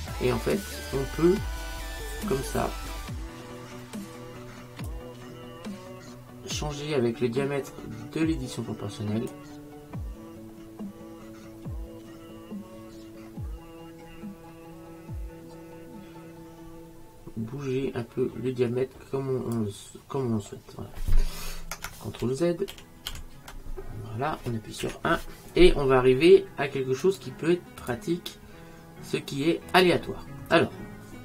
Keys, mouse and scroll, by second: 0.9 click, 9.4 click, 19.8-22.3 middle drag, 22.3 ctrl+z, 22.8 ctrl+z, 23.2 ctrl+z, 24.9 KP_1, 27.1 click.